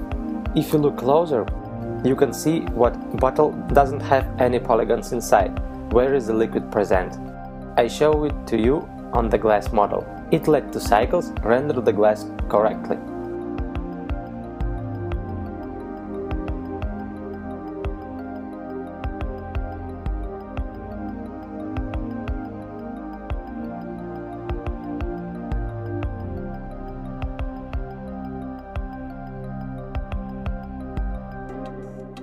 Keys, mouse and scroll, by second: 2.0 middle click, 6.0 right click, 7.2 KP_Decimal, 9.1 KP_1, 10.0 z, 11.6-12.0 scroll up 1, 12.2 scroll up 1, 14.2 shift+middle click, 17.5-18.4 scroll up 5, 18.5 shift+middle click, 26.6-27.1 scroll down 2, 27.1 shift+middle click, 27.9 shift+middle click, 29.1-29.8 scroll up 2, 30.5 right click, 31.3 middle click.